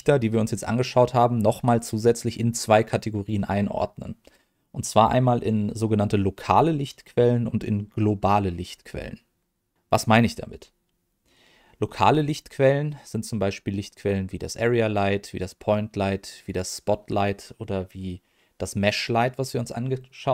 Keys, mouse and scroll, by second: 13.8 click, 15.3 click, 16.4 click.